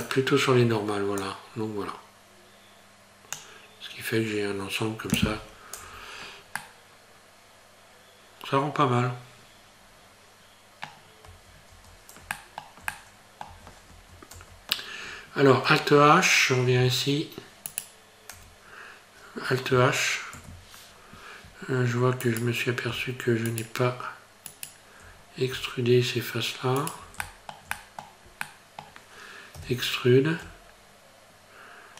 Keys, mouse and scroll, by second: 1.2 click, 5.8 Tab, 6.1-6.6 scroll down 3, 6.6 middle click, 11.3 Tab, 11.7 Tab, 12.4 shift+middle click, 12.9 middle click, 13.5 Tab, 14.3 Tab, 15.1 scroll down 2, 16.7 alt+h, 17.7 right click, 18.3 Tab, 20.4 alt+h, 20.9-21.4 scroll up 2, 22.3 right click, 23.5 shift+right click, 24.5 right click, 25.2-25.6 scroll down 3, 26.8 shift+right click, 27.2 shift+middle click, 27.7 middle click, 28.5 middle click, 29.6 e.